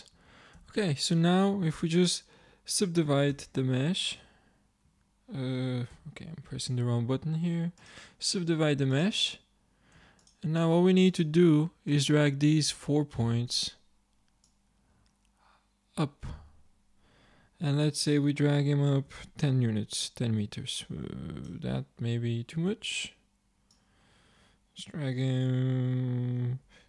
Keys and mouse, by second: 0.1 a, 0.6 a, 3.4 y, 4.2 y, 4.9 y, 6.0 t, 7.8 click, 8.4-12.8 drag, 12.8-13.9 middle drag, 15.0-16.3 drag, 16.9-18.7 middle drag, 21.9 click, 24.2-25.7 drag.